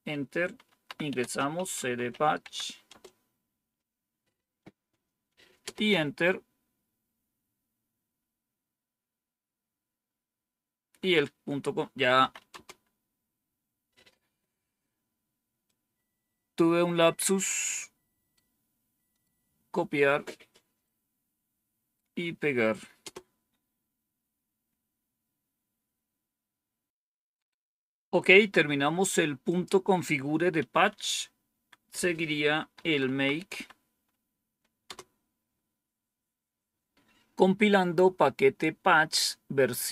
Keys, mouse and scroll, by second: 1.0-3.3 typing, 11.9-12.8 typing, 15.6-17.6 drag, 18.3 right click, 20.7-22.7 right drag, 22.9 Return, 29.4 click, 30.6 Up, 31.4 Down, 32.5-33.9 typing, 34.8 Return.